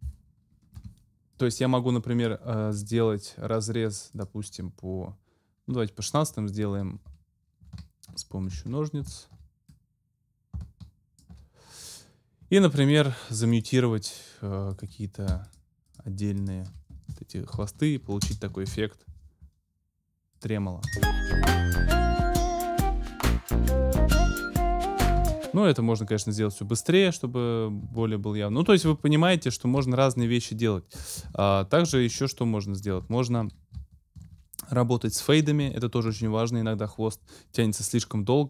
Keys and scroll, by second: 0.8 BackSpace, 17.6 ctrl+shift+m, 18.1 ctrl+super+m, 18.2 ctrl+super+space, 18.7 ctrl+super+m, 19.3 ctrl+m, 20.8 space, 25.2 space, 31.8 ctrl+m.